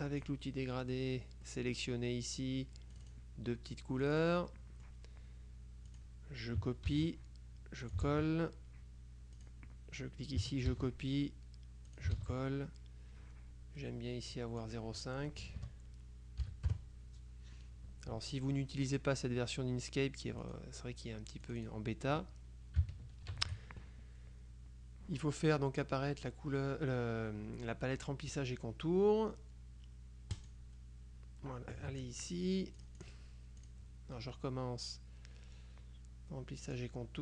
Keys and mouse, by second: 0.0 click, 0.8 middle click, 1.6 middle click, 3.0 click, 4.1 click, 6.0 click, 7.0 ctrl+c, 7.9 ctrl+click, 8.2 ctrl+v, 9.5 click, 10.8 ctrl+c, 12.0 ctrl+click, 12.3 ctrl+v, 14.4 click, 15.5 BackSpace, 16.6 KP_5, 16.8 KP_Enter, 20.5 click, 21.5 click, 23.4 ctrl+shift+f, 30.4 click, 32.0 ctrl+z, 32.9 click, 36.7 click.